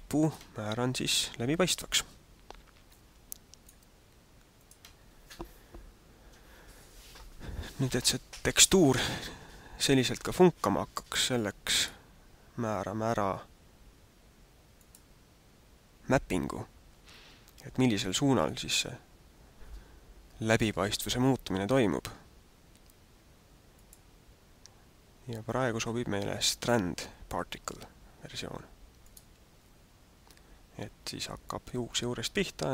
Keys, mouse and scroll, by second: 0.2 click, 3.3 click, 4.5 click, 11.9 click, 14.8 click, 23.7 click.